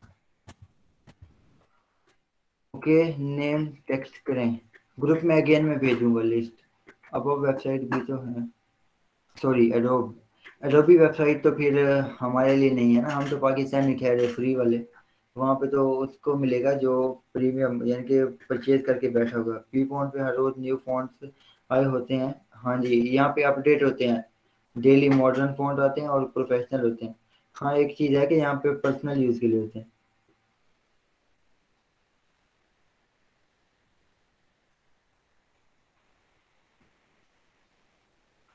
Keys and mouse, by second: 0.0-1.7 typing.